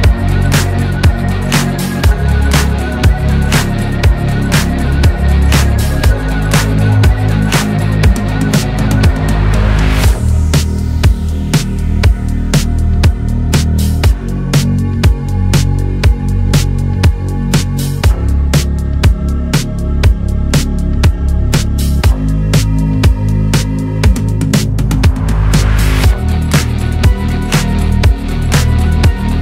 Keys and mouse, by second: 5.4 middle click.